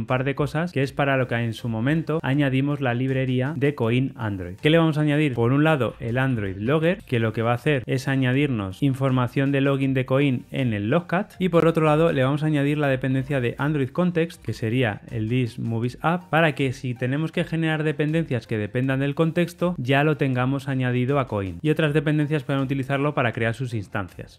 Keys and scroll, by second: 0.7 alt+super+l, 1.8 Escape, 4.6 Escape, 7.0 Return, 8.8 Return, 14.4 Tab.